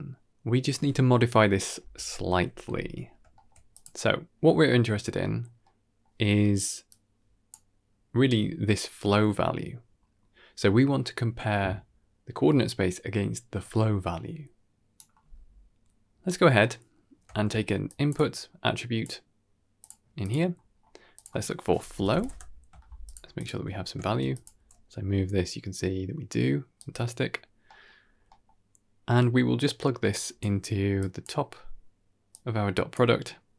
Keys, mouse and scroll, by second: 2.5 KP_1, 3.2 shift+middle click, 3.6 click, 5.5-5.9 middle drag, 6.8 click, 9.0-9.6 scroll up 1, 9.6-11.7 scroll up 8, 14.5 click, 16.5 click, 16.5 middle click, 17.2 shift+a, 20.6-22.2 scroll up 3, 21.0-22.2 drag, 23.0 ctrl+shift+click, 23.2 ctrl+shift+click, 23.9 shift+space, 24.2 click, 24.4 g, 27.6 middle click, 28.0 scroll down 2, 28.2 middle click, 30.0 click, 30.9 click, 32.2-32.8 drag.